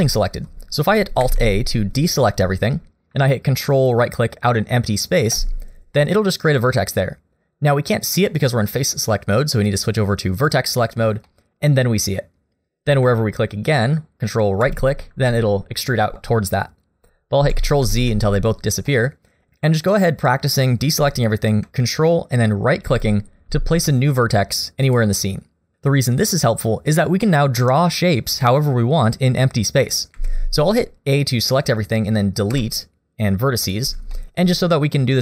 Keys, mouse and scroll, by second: 1.2 alt+a, 5.4 ctrl+right click, 8.3 middle click, 10.4 click, 11.3 middle click, 14.6 ctrl+right click, 17.4 ctrl+z, 17.9 ctrl+z, 18.9 middle click, 22.9 ctrl+right click, 24.9 click, 30.1 a, 31.2 middle click, 32.5 Delete, 34.1 shift+middle click.